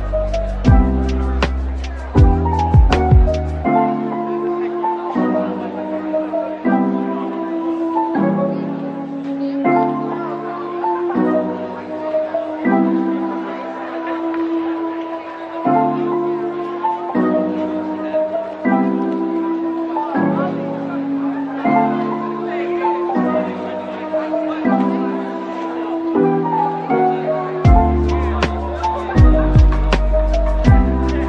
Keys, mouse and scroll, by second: 1.4 typing, 2.6 typing, 3.8 click, 3.9 typing, 4.8 click, 5.0-5.3 typing, 7.0-8.4 typing, 7.8-8.8 drag, 9.8-10.1 typing, 11.3-11.7 typing, 12.8 middle click, 14.6 double click, 15.8 double click, 17.4-18.0 typing, 19.7 shift+click, 20.0 shift+double click, 20.2 shift+click, 20.9 typing, 23.4-25.1 typing, 26.9-28.8 typing, 30.1 typing.